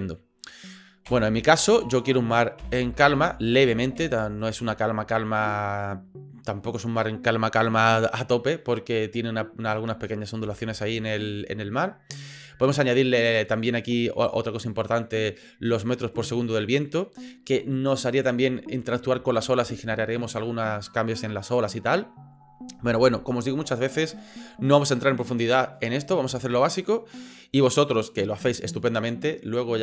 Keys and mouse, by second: 1.1 space, 1.9-4.2 drag, 4.0 space, 10.4 space.